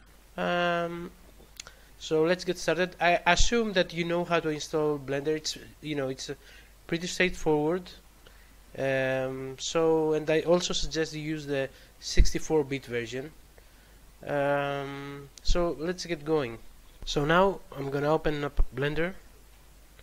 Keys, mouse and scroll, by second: 0.8 scroll up 2, 11.1 scroll up 2.